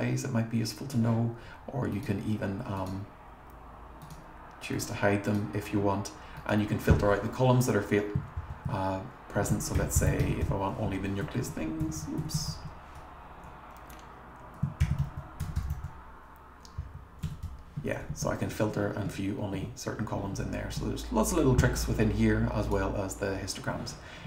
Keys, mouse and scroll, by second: 2.8 click, 4.0 click, 4.7 click, 5.3 click, 6.4 click, 8.4 shift+c, 9.5-12.5 typing, 14.6-17.3 typing, 19.1 Left, 19.5 Right, 22.6 click, 22.9 Right.